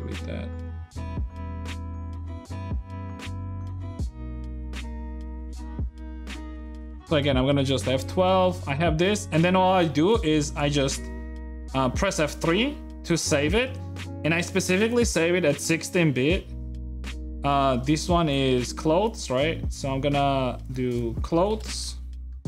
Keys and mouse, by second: 5.1 click, 5.6-7.1 middle drag, 7.1 F12.